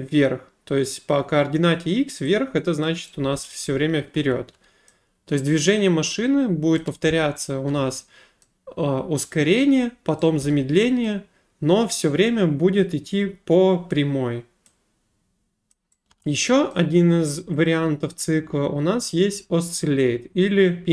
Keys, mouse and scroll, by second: 2.8 click, 3.0-5.0 typing, 4.9 middle click, 6.8 click, 7.0-8.2 typing, 8.4 right click, 10.4 d, 11.0 right click, 15.7 click, 16.1 a, 16.7 right click, 17.6 click.